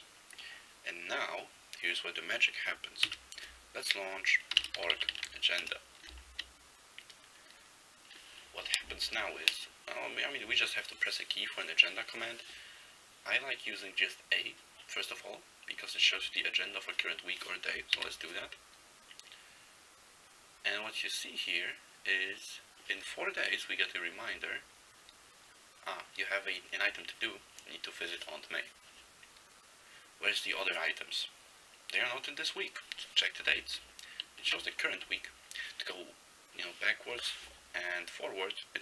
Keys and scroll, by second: 3.2 alt+x, 4.4-5.8 typing, 18.1 a, 24.4 n.